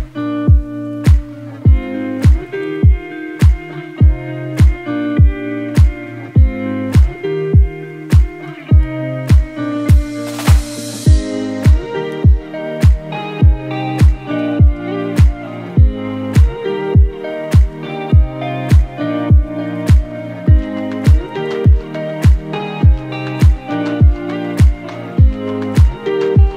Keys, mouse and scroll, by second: 0.1 ctrl+z, 1.3-14.0 drag, 15.9-16.3 scroll down 1, 16.3-19.1 typing, 16.4 scroll up 1, 17.1 click, 17.9 click, 18.4 click, 18.7 click, 19.0 click, 19.2 click, 20.0 right click, 21.0 click.